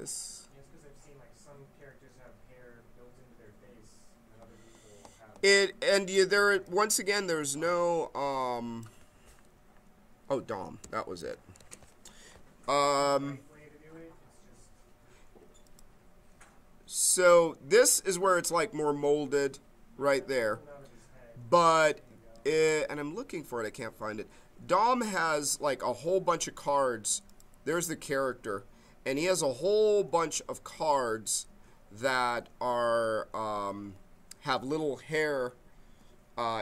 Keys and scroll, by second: 10.5-11.7 typing.